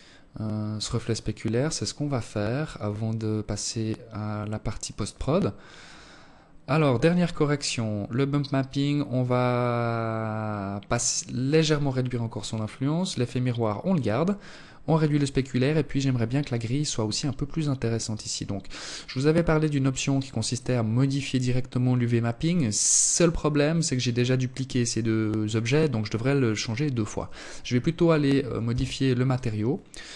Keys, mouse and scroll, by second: 26.6 Escape, 27.6 right click, 29.3 click.